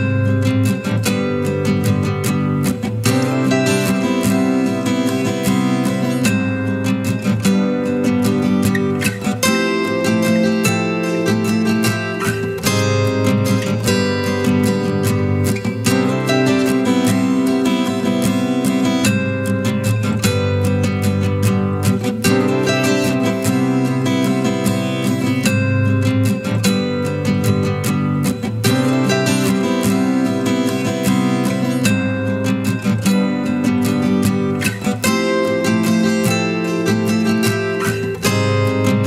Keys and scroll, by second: 30.6 ctrl+t.